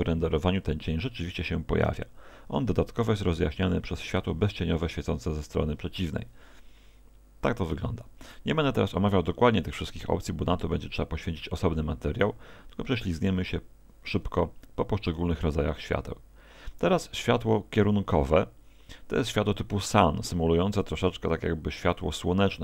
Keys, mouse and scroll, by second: 8.0 Escape, 15.1 click, 21.8 r.